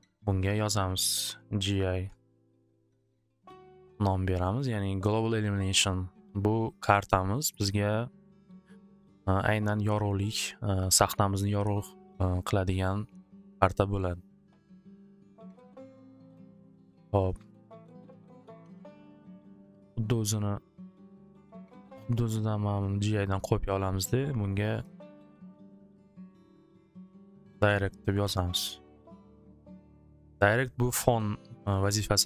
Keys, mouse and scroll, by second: 0.7 click, 1.8 typing, 2.7 Return, 4.6 click, 6.3-7.0 typing, 6.5-8.1 drag, 8.7 click, 9.5 click, 15.6 click, 16.5-18.5 drag, 20.3 click, 21.7 click, 22.9 click, 25.0 click, 25.9-28.8 typing, 28.4 Return, 30.4 click, 30.5 typing.